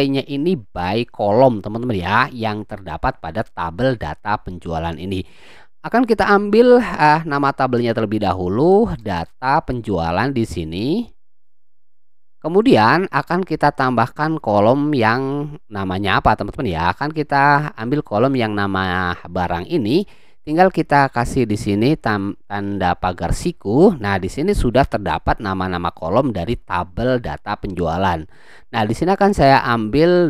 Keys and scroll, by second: 7.7 d, 8.9-9.8 typing, 23.3 [.